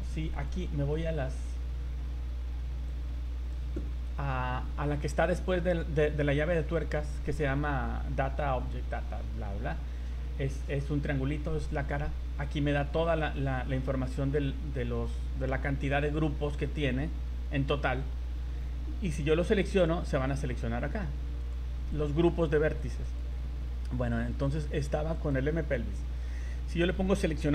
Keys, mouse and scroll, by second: 0.3 click, 0.9 click, 2.9 click, 13.1 scroll down 4, 13.7-14.3 scroll up 9, 16.6-18.3 scroll down 30, 18.3-19.3 scroll up 22, 19.8 click, 21.4 click, 21.9 click, 22.8 click, 23.0 click, 24.3 right click, 25.1 click.